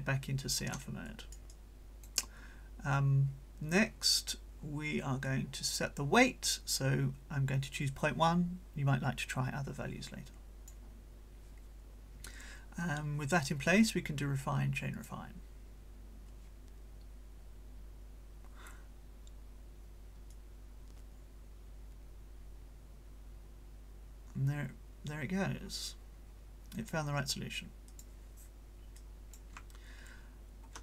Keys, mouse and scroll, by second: 0.2 ctrl+shift+scroll up 1, 1.0-2.2 ctrl+shift+right drag, 1.5 click, 5.3-10.9 drag, 13.5-15.3 drag, 20.3-27.1 drag, 27.9 click, 28.9-29.5 drag, 30.3 ctrl+shift+scroll up 1.